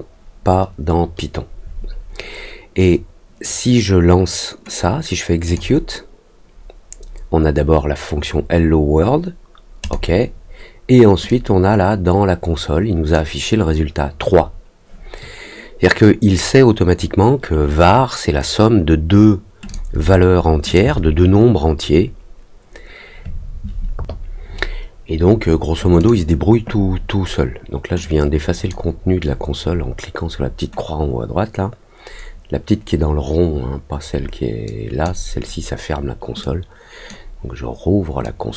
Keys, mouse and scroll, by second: 5.4 click, 9.8 click, 11.2-13.1 drag, 19.6 click, 20.6 click, 25.9 click, 27.9 click, 34.6 click, 36.3 click, 38.2 click.